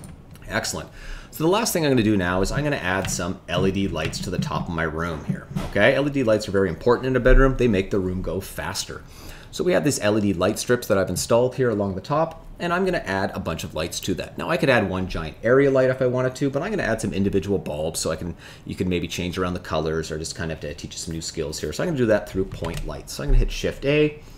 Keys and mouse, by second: 3.0 shift+middle click, 4.1 shift+middle click, 4.5 middle click, 22.5 shift+a.